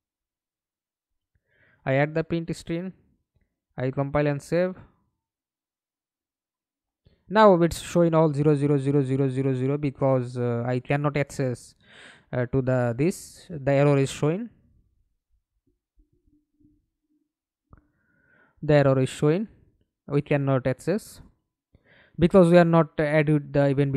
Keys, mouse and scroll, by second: 2.5 middle click, 3.9 F11, 4.6 alt+p, 8.5 w, 9.2 w, 9.5 a, 10.4 Escape, 11.0 middle click, 12.2 F11, 14.3 alt+F9, 16.3 right click, 17.1 right click, 18.2 right click, 19.3 right click, 23.8 Delete.